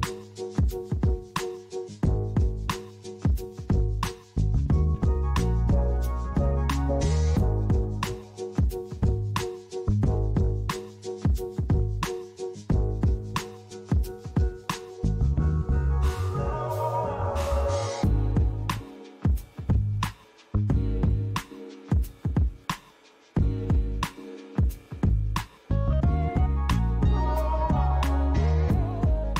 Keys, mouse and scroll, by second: 1.2 click, 3.1 KP_0, 6.4-7.0 scroll down 1, 7.4 click, 11.6-12.3 scroll down 4, 18.1-20.8 scroll down 2, 20.8 click, 22.2 click, 23.3 click, 26.6 click, 28.2-29.3 scroll up 5.